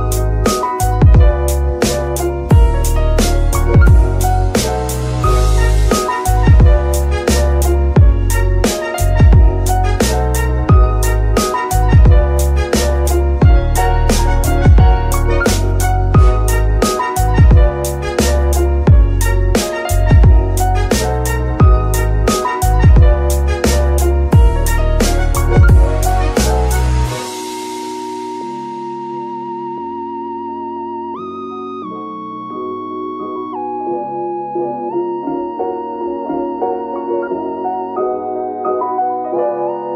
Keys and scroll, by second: 0.8-2.2 typing, 3.3-4.9 typing, 5.2 Return, 6.4 KP_1, 7.1 shift+d, 9.1 Tab, 9.4 shift+s, 10.2 Tab, 10.5 shift+s, 15.4 g, 15.8 Escape, 16.6 g, 21.7 g, 24.3 Tab, 24.6 Tab, 25.6 F2, 26.4-27.6 typing, 27.1 Left, 27.2 Left.